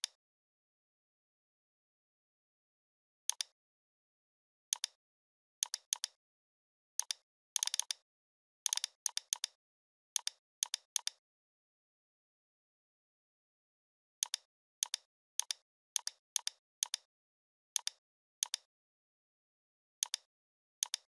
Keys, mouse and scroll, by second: 1.3 ctrl+0, 2.8-3.1 scroll down 1, 3.3-4.5 drag, 5.1 ctrl+0, 5.6-6.4 drag, 8.0 Up, 8.7 click, 11.5-13.6 typing, 14.2-19.3 drag.